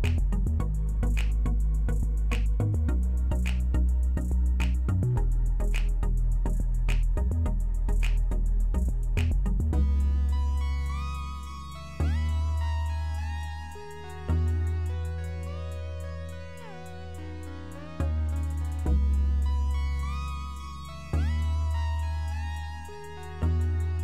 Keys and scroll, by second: 14.1-15.2 typing, 19.2 typing, 19.6 Return, 21.7-22.8 typing.